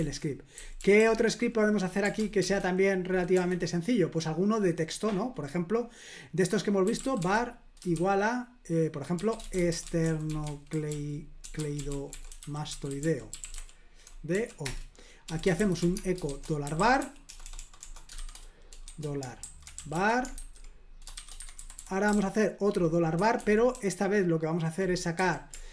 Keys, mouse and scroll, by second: 0.0 super+l, 0.6-1.0 typing, 2.0-3.4 typing, 6.6-7.9 typing, 9.0-25.7 typing, 14.6 Return, 23.2 Escape.